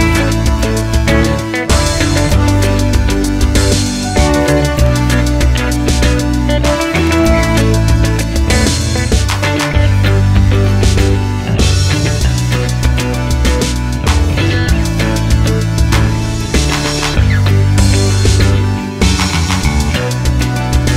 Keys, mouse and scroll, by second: 0.8 click, 1.1 g, 3.6 scroll down 1, 3.8 middle click, 4.3 click, 5.0 g, 6.1 click, 6.4-7.9 middle drag, 7.0 scroll up 2, 7.9 click, 8.8-10.2 drag, 9.9 scroll down 2, 10.7 g, 13.5-18.8 shift+middle drag, 14.3 shift+a, 16.4-16.8 scroll down 1, 16.8 Tab, 19.7 click.